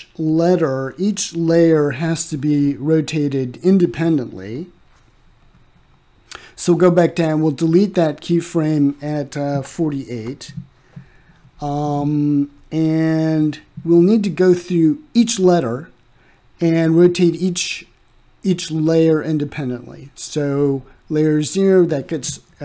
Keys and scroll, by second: 9.3 Delete, 19.5-20.5 typing, 21.6 Return.